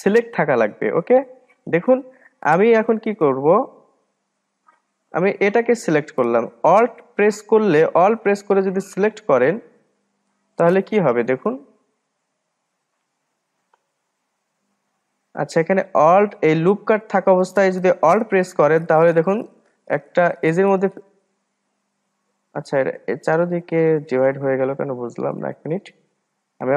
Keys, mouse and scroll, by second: 1.0-1.6 scroll down 1, 1.6-2.5 scroll down 1, 2.5-3.5 scroll down 1, 3.5 click, 5.5-8.0 drag, 9.1-10.3 drag, 10.3-13.4 middle drag, 20.6 alt+click, 21.7 alt+click, 22.6-25.6 middle drag, 25.6-26.0 ctrl+z, 26.1 ctrl+z, 26.3 ctrl+z, 26.5 ctrl+z.